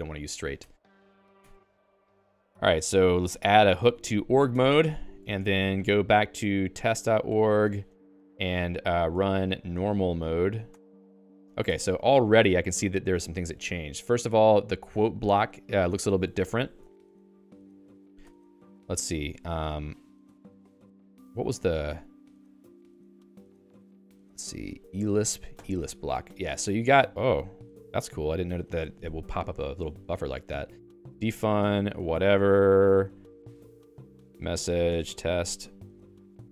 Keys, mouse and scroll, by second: 0.6 Escape, 0.7 o, 0.9 Return, 1.4 Escape, 2.6 p, 3.3 a, 4.0 ctrl+e, 4.5 Escape, 6.7 e, 7.3 ctrl+j, 7.5 ctrl+j, 7.7 Return, 9.2 alt+x, 9.5-10.6 typing, 10.7 Return, 11.6 Escape, 11.9-13.2 typing, 16.2-18.2 typing, 23.8 Down, 24.1 Down, 24.3 Down, 24.5 Down, 24.7 Down, 25.1 Up, 25.3 Up, 25.6 Return, 29.4 i, 30.6-36.1 typing, 33.8 Return.